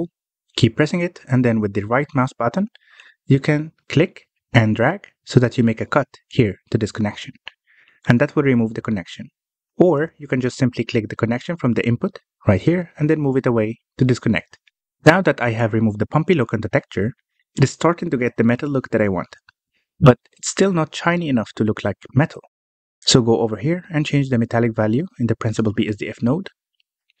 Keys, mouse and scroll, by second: 4.6 ctrl+right click, 11.4 ctrl+z, 12.3 click, 16.1-16.6 scroll down 3, 16.6-17.2 middle drag, 17.2 scroll up 2, 17.4 middle click, 17.5 scroll down 1, 17.7-18.6 middle drag, 18.6 scroll down 1, 18.8-19.9 middle drag, 19.9 alt+a, 20.7 click, 21.4-22.0 scroll down 9, 22.0-24.0 middle drag, 24.0-25.5 scroll up 8, 24.3 middle click, 25.5-27.2 middle drag.